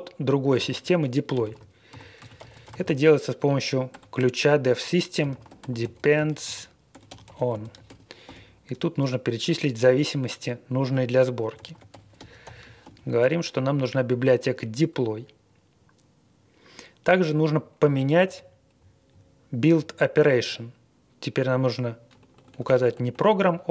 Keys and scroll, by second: 0.5-3.8 typing, 4.9-8.2 typing, 11.2-13.6 typing, 17.1 Page_Up, 17.4 Page_Up, 17.7 Page_Down, 17.9 Page_Down, 18.1 Up, 18.1 Down, 18.3 Down, 18.7 Left, 19.0 Left, 19.0 Left, 19.7 Left, 22.1-23.7 typing.